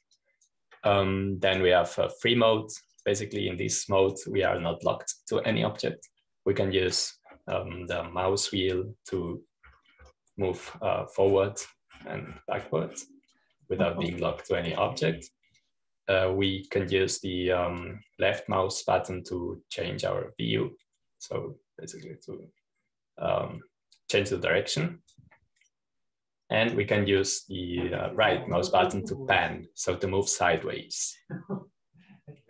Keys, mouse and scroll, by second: 0.0-11.5 drag, 15.2-19.6 drag, 20.4-29.4 drag, 27.6-29.4 right drag.